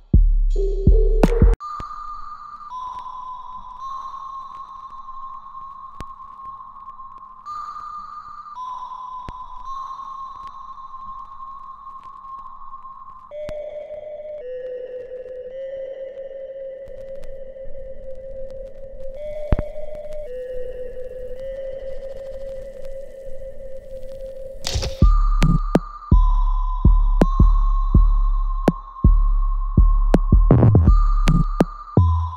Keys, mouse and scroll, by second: 0.3 alt+right click, 0.7-3.8 alt+drag, 3.8 alt+middle click, 4.5-6.5 alt+drag, 6.5 alt+middle click, 9.3 alt+click, 9.9 alt+middle click, 10.3 alt+right click, 11.2 alt+click, 11.7 alt+middle click, 12.6 alt+right click, 13.8-16.7 alt+drag, 16.7 alt+click, 17.4 middle click, 17.4 alt+middle click, 18.5-20.8 alt+drag, 20.8 middle click, 22.4 click, 23.2-25.9 alt+right drag, 25.9-29.9 ctrl+drag, 29.9 alt+click, 30.5-32.3 alt+middle drag.